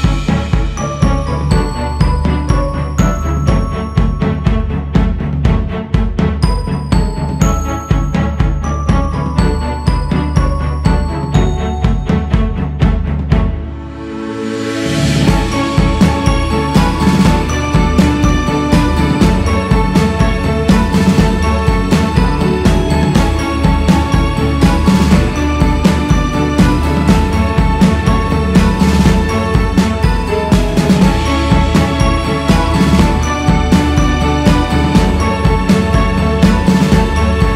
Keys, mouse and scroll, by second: 6.5 ctrl+z, 7.0 ctrl+z, 10.1-18.4 drag, 18.4-19.8 scroll down 2, 19.8-20.8 drag, 20.8-21.2 scroll up 1, 21.2-22.6 drag, 22.6 ctrl+z, 23.1 ctrl+z, 24.0 ctrl+z, 25.1-25.8 scroll up 1, 25.8-26.3 scroll down 2, 26.5-27.2 scroll up 2, 27.5-28.3 scroll up 2, 28.3-31.4 drag, 33.0-37.5 drag.